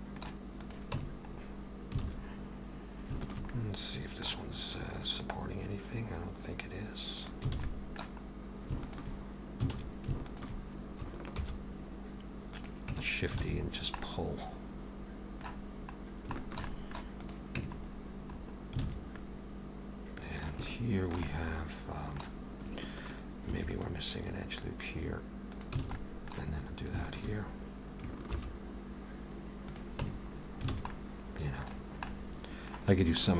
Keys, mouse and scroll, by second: 0.6 click, 1.0 Tab, 1.3-2.0 scroll up 1, 2.0 scroll up 1, 2.0 alt+a, 3.2 alt+shift+click, 3.5 middle click, 5.2 click, 7.5 alt+a, 7.7 middle click, 8.9 alt+shift+click, 9.8 alt+a, 10.2 alt+shift+click, 11.4 shift+e, 13.0 Tab, 13.4 alt+a, 13.6-14.8 scroll down 3, 14.0 middle click, 16.4 shift+middle click, 16.7 middle click, 17.2 click, 17.6 Tab, 17.7-18.8 scroll up 6, 18.8 alt+a, 19.2 middle click, 20.7 shift+middle click, 21.3 middle click, 23.5 ctrl+r, 25.9 alt+a, 26.0 middle click, 27.1 alt+shift+click, 28.3 shift+e, 30.1 Tab, 30.3-30.7 scroll down 2, 30.7 alt+a, 30.9 middle click, 31.8-32.3 scroll down 2, 32.1 middle click, 33.0 scroll down 1, 33.2 shift+middle click.